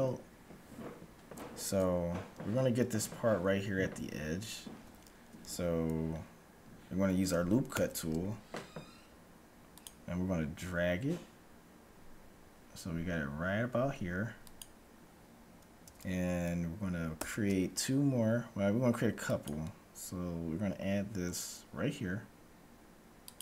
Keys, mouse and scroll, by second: 4.9 a, 7.9 ctrl+r, 15.9 a, 17.0 ctrl+r.